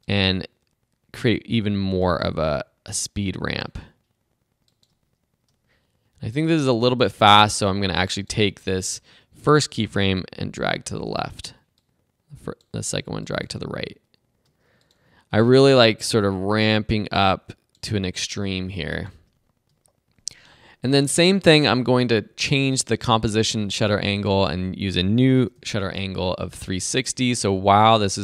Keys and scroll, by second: 25.8 Up.